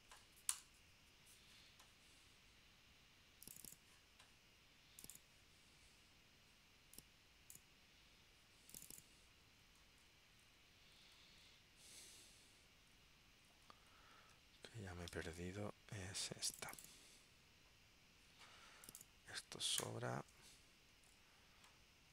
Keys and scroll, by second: 14.3 super+Tab.